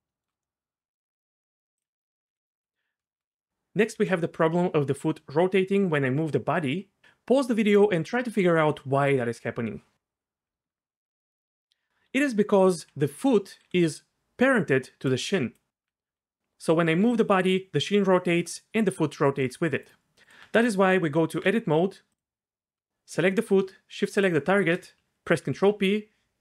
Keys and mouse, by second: 1.8 click, 2.3 g, 4.0 g, 13.6-17.0 typing, 13.9 click, 20.2 Tab, 20.6 Tab, 25.4 ctrl+p.